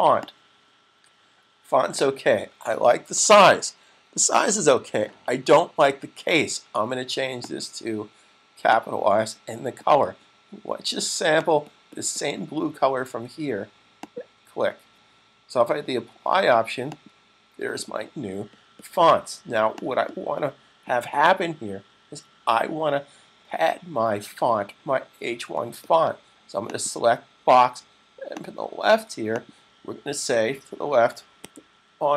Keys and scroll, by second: 31.4-32.1 typing.